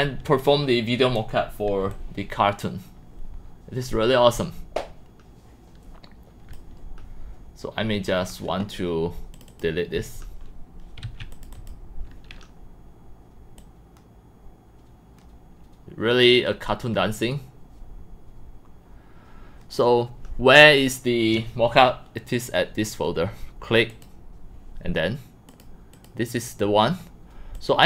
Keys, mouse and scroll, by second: 1.8-3.6 c, 2.1-4.2 drag, 3.6-6.5 c, 5.1 c, 6.0-6.5 drag, 7.3-8.8 drag, 9.5 click, 11.0 q, 11.3 click, 13.6-14.6 drag, 18.1-18.7 drag, 19.5 click, 22.3 click, 23.9 click, 24.7 scroll up 1, 25.5 click, 25.9 click, 27.5 click, 27.8 click.